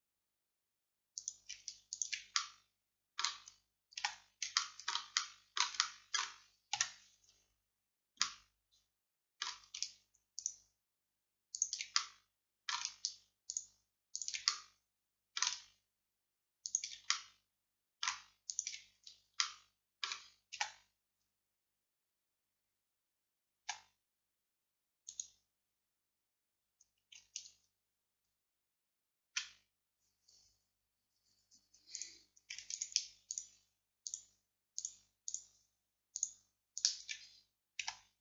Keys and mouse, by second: 1.2-3.2 drag, 3.2 middle click, 4.0 z, 6.8 KP_Decimal, 10.5-15.9 drag, 15.9 right click, 16.7-18.4 middle drag, 18.6-20.2 middle drag, 20.6 z, 23.7 x, 32.0-38.2 drag, 37.9 x.